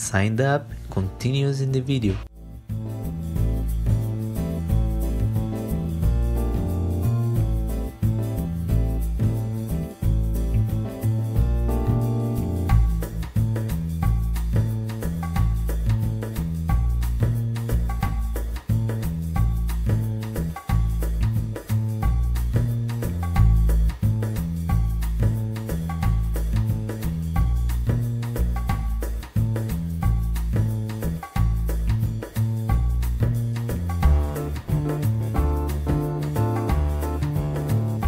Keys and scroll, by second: 0.0 Delete, 0.1 Insert, 23.8 1, 25.2 z, 26.8 e, 29.3 w.